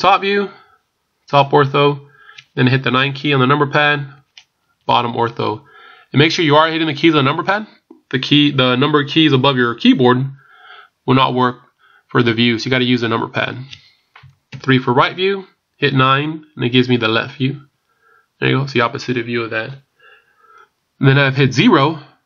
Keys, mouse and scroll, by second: 4.0 KP_9, 7.4 scroll down 1, 14.4 KP_3, 17.6 KP_9, 21.9 KP_0.